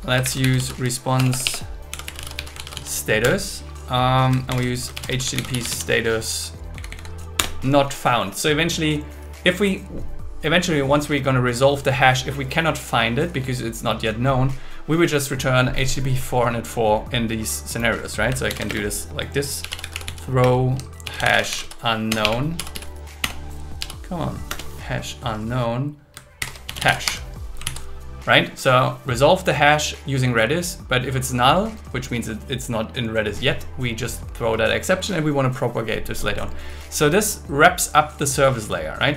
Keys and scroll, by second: 0.2 shift+r, 1.1 BackSpace, 2.5 shift+s, 3.2 Return, 4.5 shift+8, 4.9 shift+h, 6.0 shift+s, 6.7 Down, 7.3 Return, 18.5 shift+6, 18.7 space, 20.4 space, 21.0 shift+h, 21.5 shift+u, 22.1 BackSpace, 23.6 BackSpace, 24.5 Return, 26.4 shift+8, 27.0 Escape, 28.7 super+s.